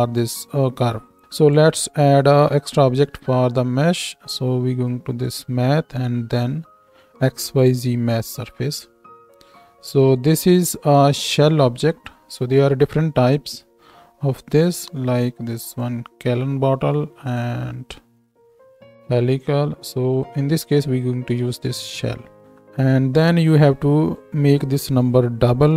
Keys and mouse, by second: 1.2-3.0 shift+middle drag, 3.2 shift+a, 9.2-9.6 drag, 18.7-20.5 drag.